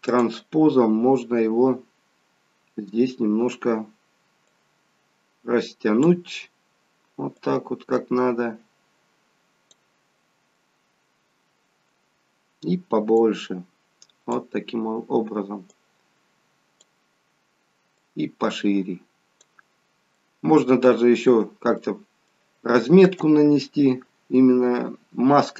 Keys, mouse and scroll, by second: 0.1 click, 2.7 scroll up 2, 4.6 click, 7.5 click, 10.5-11.4 scroll down 4, 13.0 scroll down 1, 13.2 click, 15.8 click, 18.0 click, 19.9 scroll down 3, 20.2 middle click, 22.0 middle click.